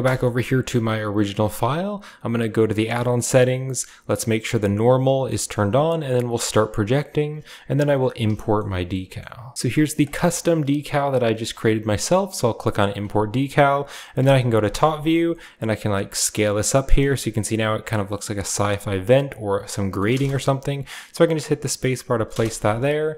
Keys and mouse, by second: 1.2 n, 2.8 shift+click, 5.8 click, 7.7-9.5 shift+middle drag, 12.4 drag, 12.5 middle click, 12.9 click, 13.6-23.1 middle drag, 14.0 KP_7, 15.4-19.8 drag.